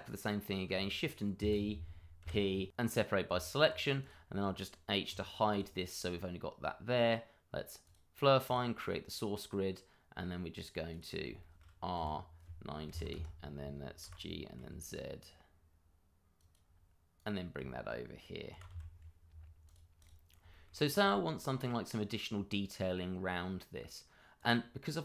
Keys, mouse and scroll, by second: 0.7 shift+d, 1.4 Escape, 2.2 p, 2.9 click, 3.8 Tab, 4.1 click, 5.5 click, 6.0 middle click, 7.8 click, 9.0-10.9 scroll down 1, 10.9 click, 11.4 shift+middle click, 11.9 r, 12.8 KP_9, 13.1 KP_Enter, 14.0 g, 14.5 z, 16.3 click, 17.6 shift+middle click, 18.1 middle click, 18.5 g, 18.7 y, 19.6 click, 20.1 double click, 20.5 shift+middle click, 20.5 middle click, 20.8-21.4 scroll up 1, 24.3 click.